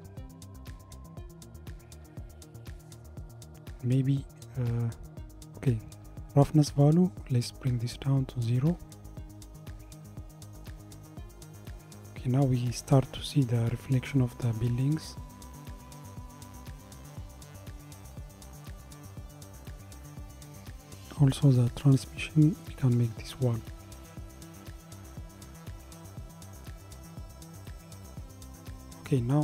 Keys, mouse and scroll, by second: 8.2-11.5 drag, 21.6-24.7 drag.